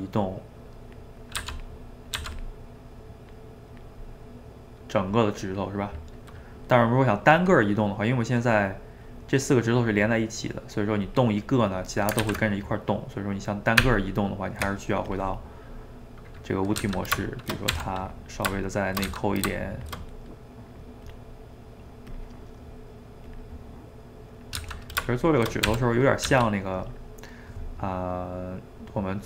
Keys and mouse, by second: 1.4 f, 1.8 middle click, 2.2 f, 3.0-4.1 drag, 4.1-8.5 middle drag, 8.5-10.5 drag, 10.5 middle click, 11.0-12.2 drag, 12.2 ctrl+z, 12.8-13.8 middle drag, 13.8 Tab, 15.2 click, 15.5-16.8 middle drag, 16.8 g, 19.1 g, 20.0-21.1 middle drag, 21.1 click, 21.8 middle click, 22.1 click, 22.3-23.3 middle drag, 23.3 click, 23.5-24.6 middle drag, 24.6 g, 25.7 r, 27.0-29.2 middle drag.